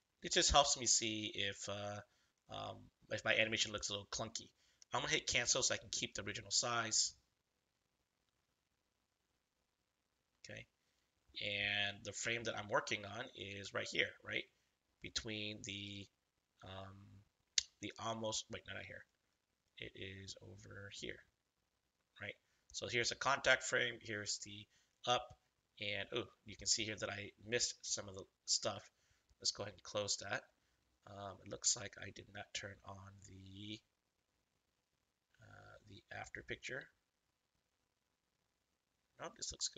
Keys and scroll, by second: 12.2 space.